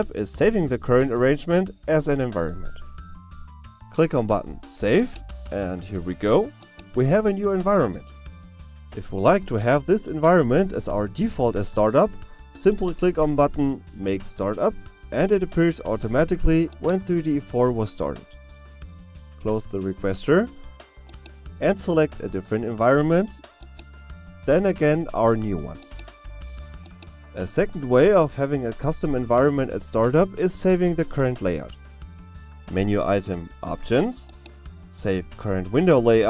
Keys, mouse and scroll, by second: 5.0 click, 16.8 click.